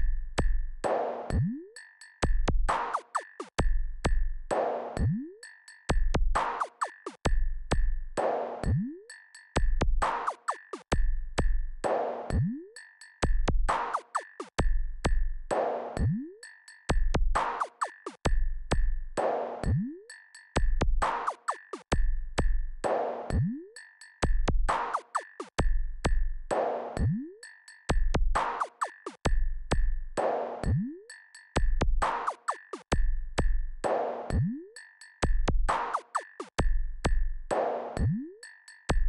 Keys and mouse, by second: 4.9 ctrl+KP_8, 7.1 KP_4, 14.3 click, 19.7-27.6 drag.